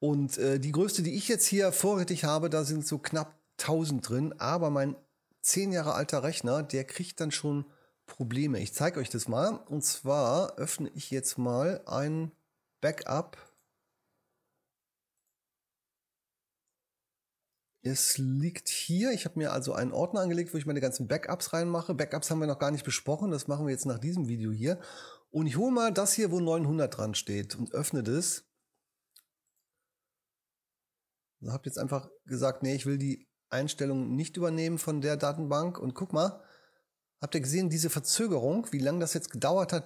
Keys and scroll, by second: 18.0 super+Up.